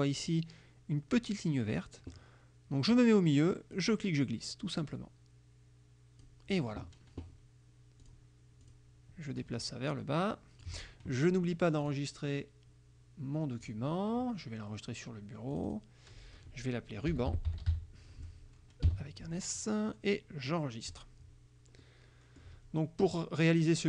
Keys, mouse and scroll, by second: 3.8-6.5 drag, 8.1 click, 8.7 click, 9.4-10.9 drag, 11.9 click, 13.7 click, 15.6 click, 16.9-18.9 typing, 21.0 click, 21.9 click, 23.2 click.